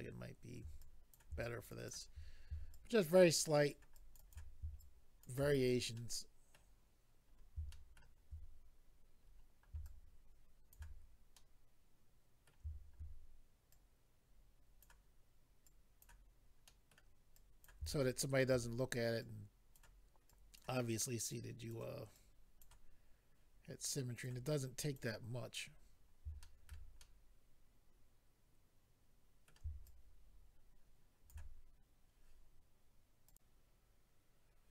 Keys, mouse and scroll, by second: 0.8 click, 1.4 click, 2.7 shift+click, 3.9 shift+click, 4.3 shift+click, 4.8 shift+click, 5.6-6.4 scroll down 2, 5.9 middle click, 7.3-7.7 scroll down 1, 7.7 shift+middle click, 8.1-8.8 shift+scroll up 1, 8.8-9.5 scroll up 3, 9.8 shift+click, 11.3 middle click, 13.7 click, 15.6 click, 16.6 middle click, 17.3 click, 17.9 shift+middle click, 19.2 click, 20.2 click, 21.3 click, 22.1 click, 23.9 click, 24.8 click, 25.7 scroll down 1, 26.4 shift+middle click, 27.0 middle click, 29.8 shift+click, 34.5 click.